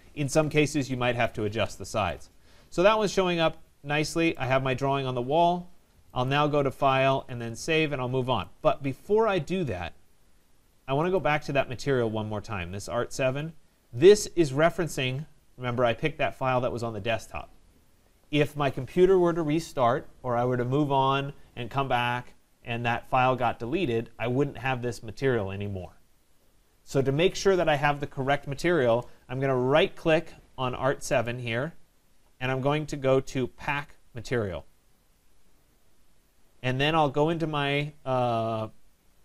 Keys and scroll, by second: 0.4 Escape.